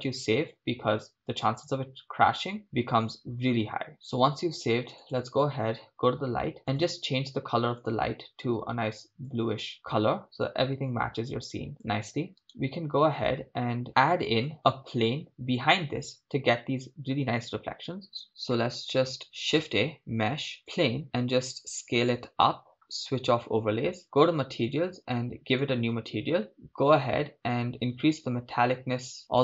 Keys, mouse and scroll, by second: 2.7-3.1 scroll down 4, 6.7-10.2 drag, 12.7 right click, 13.9 shift+space, 14.5 shift+space, 19.2 click, 19.3 shift+a, 21.4 s, 25.8 click, 28.5-29.4 drag, 28.5 scroll down 3.